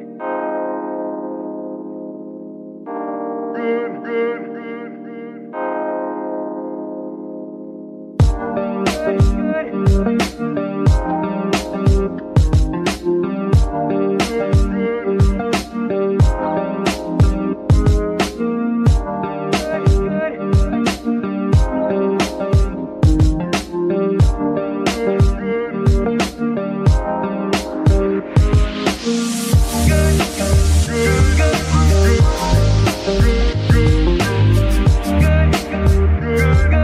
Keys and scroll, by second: 2.7 r, 2.8 z, 3.4 Escape, 4.4 r, 4.5 z, 6.3 Escape, 9.9 KP_Subtract, 10.9 Return, 12.4 r, 12.5 z, 16.1 Escape, 16.7 r, 16.9 x, 19.0 Escape, 19.6 space, 22.3 r, 22.5 z, 24.1 Escape, 25.0 r, 25.0 z, 27.3 Escape, 32.8 g, 33.0 y, 35.5 Escape, 35.9 space.